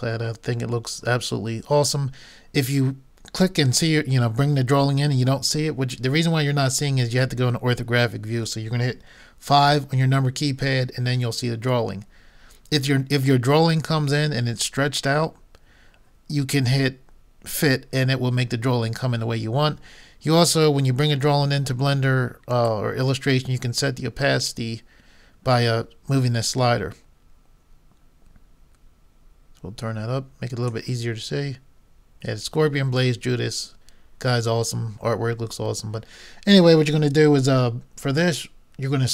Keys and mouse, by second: 9.7 KP_5, 22.6-24.3 drag, 31.4 click.